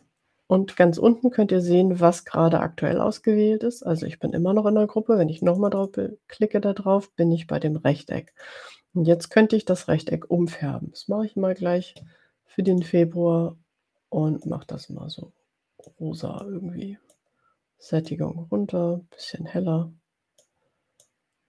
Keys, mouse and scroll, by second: 5.4 click, 8.3 click, 12.8 click, 14.6-16.1 drag, 16.5-17.5 drag, 18.1-20.7 drag, 21.0-21.4 drag.